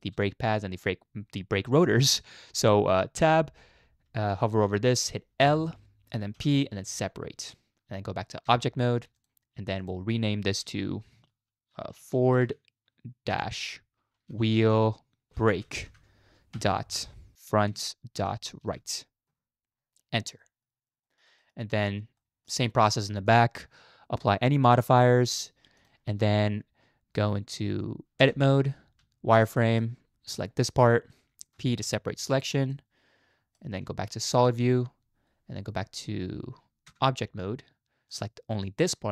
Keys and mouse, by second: 3.2 Tab, 5.4 l, 6.4 p, 8.5 Tab, 9.8 click, 10.6 F2, 14.6 e, 15.3 shift+BackSpace, 20.4 middle drag, 21.1 shift+middle click, 21.4 middle click, 22.2 shift+middle drag, 23.2 click, 24.5-24.9 drag, 25.3 click, 28.2 Tab, 29.0 z, 29.6 middle click, 30.4 click, 31.5 p, 32.7 middle click, 33.9 z, 36.9 Tab, 38.1 click.